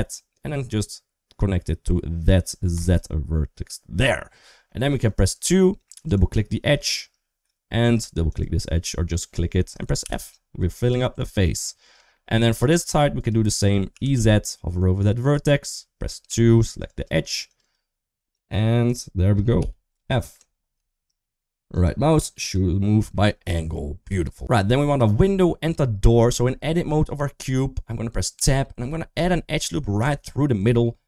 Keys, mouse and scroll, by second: 4.7 2, 5.9 click, 9.8 f, 10.8 middle click, 11.9 shift+middle click, 12.7 1, 13.7 e, 16.1 2, 16.5 click, 16.7 click, 17.4 click, 18.7 shift+click, 19.4 f, 19.9 middle click, 20.2 Tab, 20.6 shift+middle click, 21.0 middle click, 21.6 right click, 22.9 shift+middle click, 23.1 typing, 23.2 middle click, 24.2 ctrl+z, 25.9 Tab, 28.2 Tab, 29.8 ctrl+r.